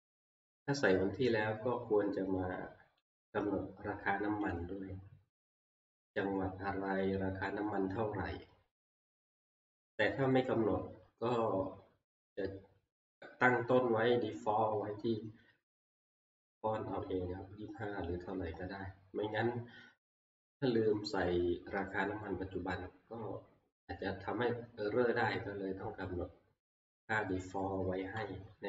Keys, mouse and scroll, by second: 3.2 click, 4.5 click, 13.2 click.